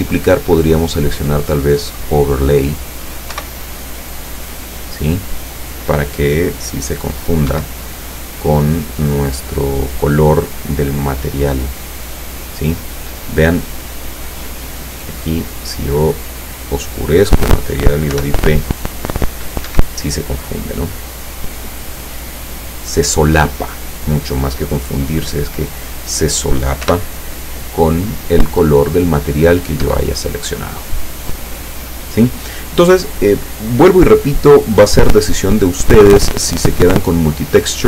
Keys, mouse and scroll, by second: 0.0 click, 2.0 click, 3.4 p, 7.5 Escape, 9.3-9.9 scroll up 3, 10.7 click, 12.5-13.1 scroll down 2, 14.8 click, 15.9 click, 18.1 p, 19.7 Escape, 20.7 click, 21.6 click, 26.9 p, 29.9 Escape, 37.1 click.